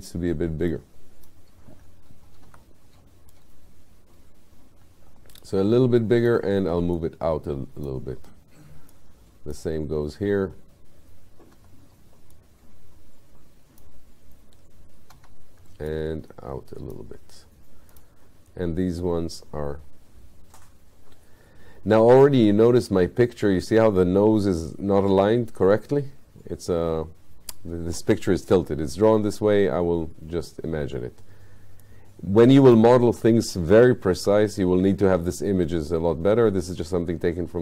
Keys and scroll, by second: 2.5 r, 6.4 w, 11.6 r, 15.1 w, 34.2 r.